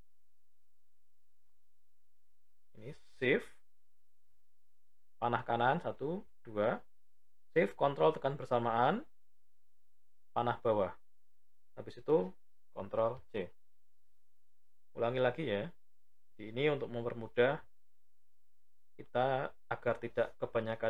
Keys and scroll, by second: 3.1 shift+Right, 7.3 ctrl+shift+Down, 12.6 ctrl+c.